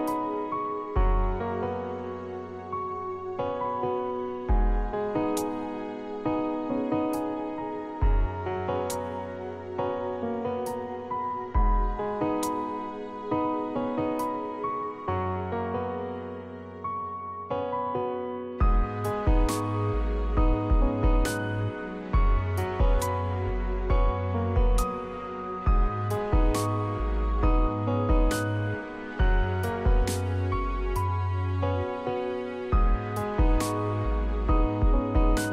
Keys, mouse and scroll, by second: 0.0 Escape, 3.1 click, 3.3 click, 4.1 click, 4.4 click, 4.6 click, 18.4 Home, 27.9 Escape, 35.4 Escape.